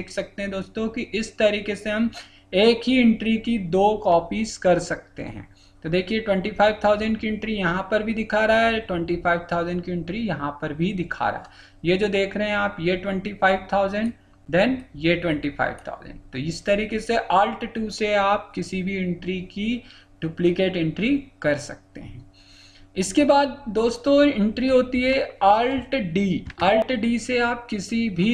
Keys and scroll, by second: 26.4 alt+d.